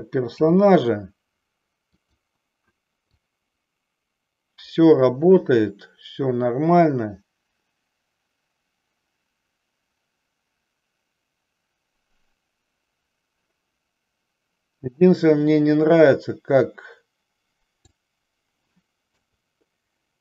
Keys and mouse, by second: 0.4 n, 1.9 click, 3.1-18.0 drag, 19.2 KP_3.